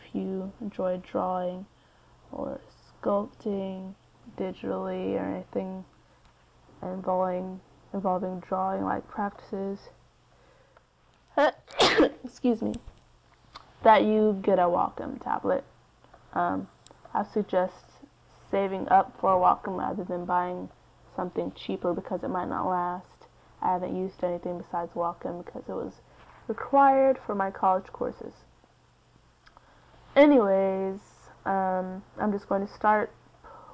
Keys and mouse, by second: 1.3 middle click, 2.5-11.8 middle drag, 12.1-21.0 middle drag, 21.1 middle click, 21.8-24.6 drag, 27.8-29.8 drag, 31.4 middle click.